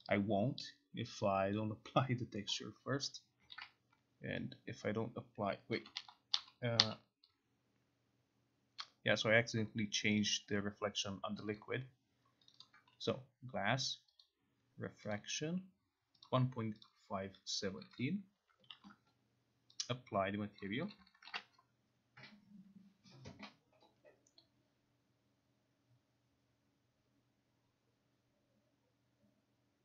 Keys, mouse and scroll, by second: 1.6 click, 3.5 click, 3.6 ctrl+z, 5.8 click, 6.1 ctrl+z, 6.5 ctrl+z, 6.9 ctrl+z, 9.3 click, 10.1 click, 10.3 click, 11.6 click, 12.6 click, 12.7 click, 14.3 click, 15.2 click, 16.4 click, 17.1 click, 18.1 click, 20.7 click, 21.0 click, 21.4 ctrl+r.